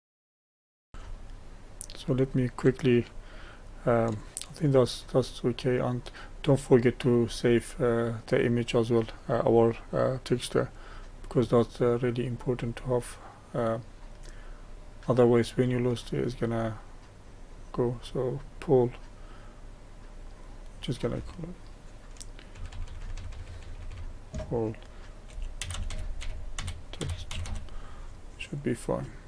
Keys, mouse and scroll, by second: 0.1 shift+middle click, 0.3 click, 0.5 shift+middle click, 0.6 click, 0.6 shift+middle click, 0.7 click, 1.4-15.4 shift+middle drag, 15.4-29.2 drag.